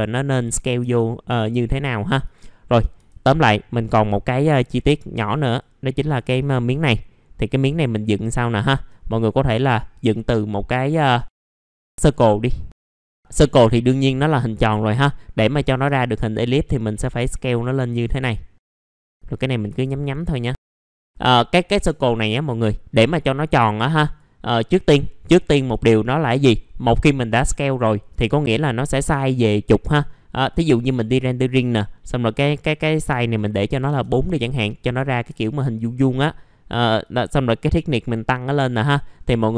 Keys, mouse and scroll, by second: 0.9 alt+middle click, 2.2 click, 3.6-4.3 scroll up 1, 4.3 click, 4.6 right click, 5.4 click, 5.8-6.9 scroll up 1, 6.9 middle click, 8.4 ctrl+right click, 9.9 click, 11.1 ctrl+right click, 12.1-15.0 drag, 15.0 middle click, 16.4-20.8 drag, 20.8 middle click, 33.7 KP_4, 34.7 middle click, 35.0 scroll up 1, 35.3 F4, 37.0-39.0 drag, 39.0 middle click, 39.2 scroll down 1, 39.2 F4.